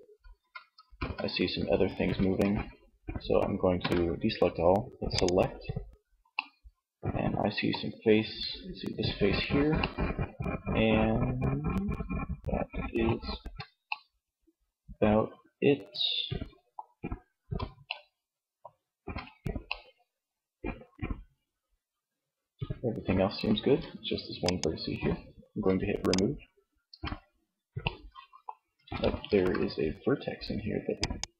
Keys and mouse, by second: 0.0 ctrl+z, 1.5 Tab, 3.0 a, 4.2-5.5 drag, 5.5 middle click, 12.1 z, 16.3 z, 18.0 z, 22.6 z, 25.9 Tab, 27.8 Tab, 28.4 ctrl+Tab.